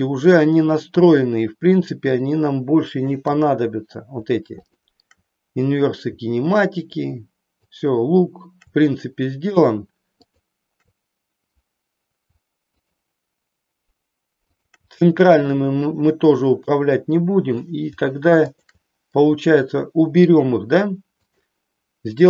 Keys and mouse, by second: 2.1-3.2 shift+drag, 4.6-6.0 shift+drag, 7.0 shift+click, 10.2-11.6 shift+drag, 12.7-14.0 shift+drag, 14.5-15.8 shift+drag, 18.5-19.7 shift+drag, 21.3-22.2 drag.